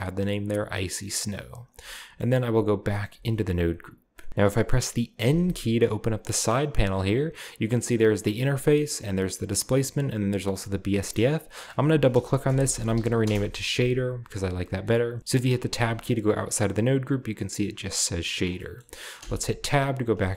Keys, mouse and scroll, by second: 0.1-0.6 drag, 1.6 click, 2.2 click, 2.2-3.1 scroll up 1, 3.6-4.1 scroll down 2, 4.1 middle click, 4.7-5.2 middle drag, 5.2 n, 9.0-9.9 drag, 10.0-10.9 drag, 11.4 click, 12.4-13.0 typing, 13.2 Return, 14.9 middle click, 15.3-15.8 middle drag, 15.3-16.8 scroll up 1, 18.1 click, 19.2 Tab, 19.7-20.3 scroll down 2.